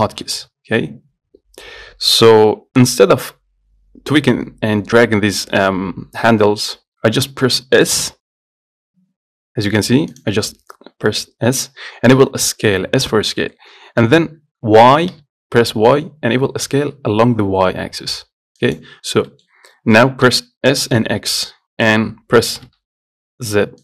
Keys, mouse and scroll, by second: 2.3 middle click, 3.1-5.8 scroll down 1, 6.1-6.5 scroll up 1, 6.5 middle click, 7.2 scroll down 2, 8.3 s, 19.3 scroll down 2, 19.5 middle click, 20.5 s.